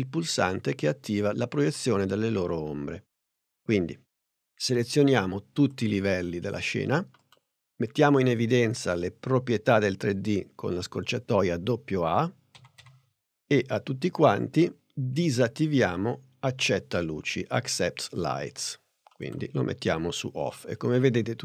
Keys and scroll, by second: 12.6 a.